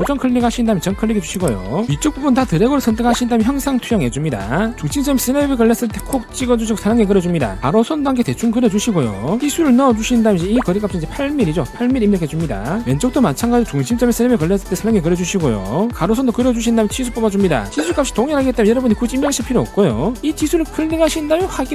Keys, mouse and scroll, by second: 0.8 click, 1.7 click, 2.7 click, 3.6 click, 4.1 click, 4.6 click, 4.8 1, 6.1 click, 7.7 click, 9.2 click, 9.5 click, 10.2 click, 10.6 click, 12.7 click, 14.1 click, 14.4 middle click, 15.8 click, 16.1 click, 17.2 click, 17.7 d, 17.9 click, 18.6 click, 19.2 click, 21.0 click.